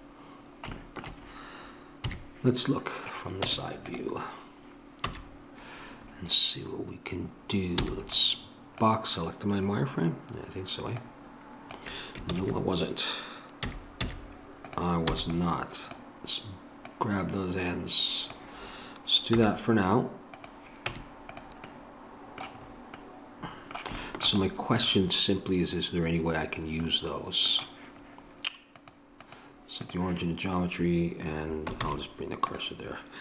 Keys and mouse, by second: 2.0 KP_3, 2.2 middle click, 3.4 Tab, 5.0 a, 7.3 middle click, 7.8 b, 11.0-13.6 drag, 12.3 ctrl+z, 13.6 a, 14.0 z, 16.8-20.9 drag, 20.9 Tab, 24.8-28.7 middle drag, 28.7-31.7 drag, 31.7 shift+s.